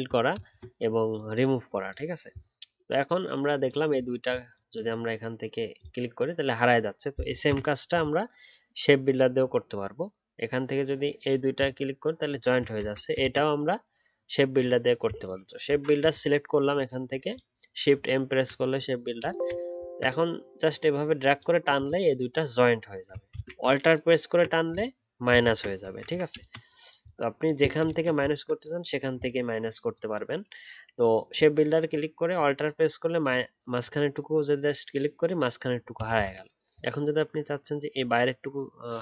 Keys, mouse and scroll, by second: 7.5 ctrl+z, 12.8 ctrl+z, 13.2 ctrl+z, 15.6 shift+m, 18.2-19.3 alt+scroll up 1, 19.8 alt+scroll down 2, 23.3 ctrl+z, 23.8 alt+click, 25.4 ctrl+z, 28.3-31.3 alt+scroll up 1, 32.6-33.2 alt+scroll up 2, 33.2 alt+click.